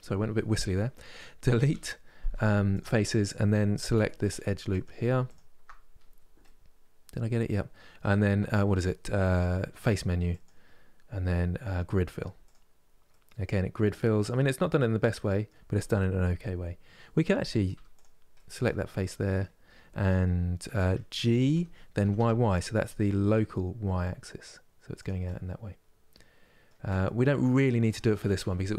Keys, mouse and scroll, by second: 1.4 Delete, 3.6 2, 4.4-6.1 alt+drag, 6.1-9.9 middle drag, 9.9-12.7 drag, 12.7-17.4 middle drag, 17.4 3, 17.6 click, 18.0-21.2 middle drag, 21.2 g, 24.9-28.7 middle drag.